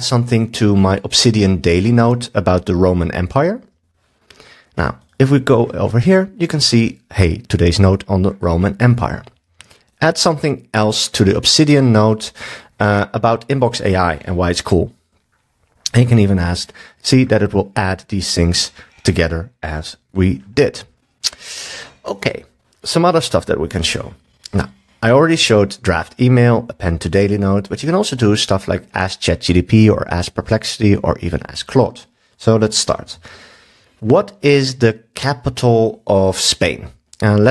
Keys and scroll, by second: 9.4 super+s, 33.1 super+s.